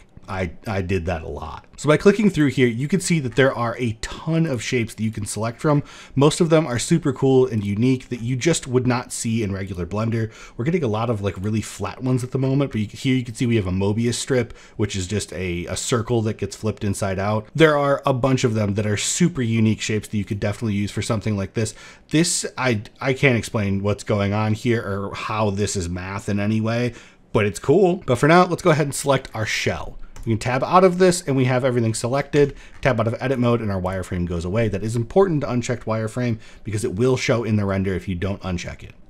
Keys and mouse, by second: 12.8-16.9 middle drag, 17.4 middle click, 20.6-24.1 middle drag, 29.2 middle click, 31.2 middle click, 31.6 shift+middle click, 31.9 Tab, 32.9 click, 33.8 middle drag, 37.7 middle click, 38.6 middle drag.